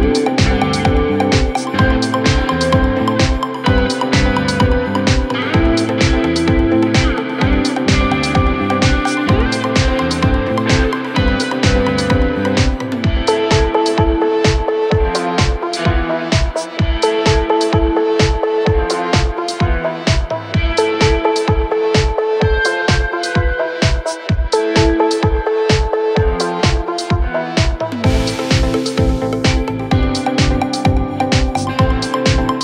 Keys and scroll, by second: 10.3 Delete, 19.3 w, 19.8 d, 20.6 shift+Page_Down, 21.1 f.